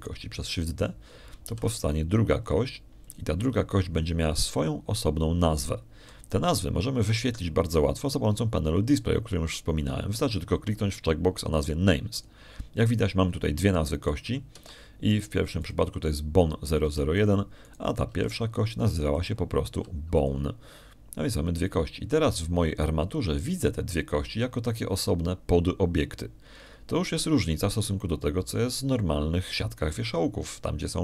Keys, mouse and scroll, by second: 0.6 right click, 1.2 Tab, 1.8 right click, 3.3 shift+d, 4.9 ctrl+click, 14.0 click, 14.9 middle click, 15.6 shift+click, 16.4 shift+r, 17.5 click, 18.7 r, 19.0 click, 19.5 right click, 19.9 r, 21.0 click, 21.6 g, 22.0 click.